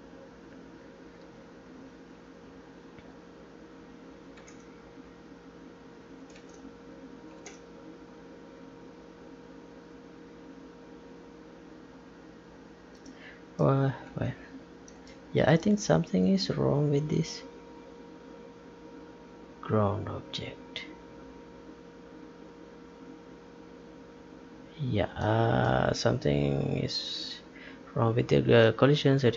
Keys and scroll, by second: 4.5 Tab, 6.5 Tab.